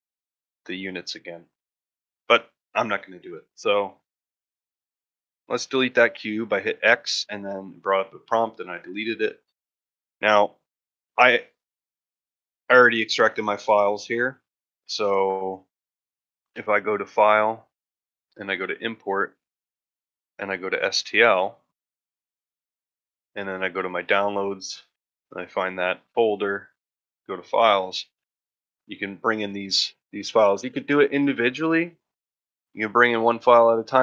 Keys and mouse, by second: 0.0 middle drag, 0.5 ctrl+middle drag, 0.8 shift+middle drag, 1.5-2.0 shift+middle drag, 3.4 middle drag, 3.7-4.3 middle drag, 4.8 middle drag, 5.1 middle drag, 6.2-6.5 middle drag.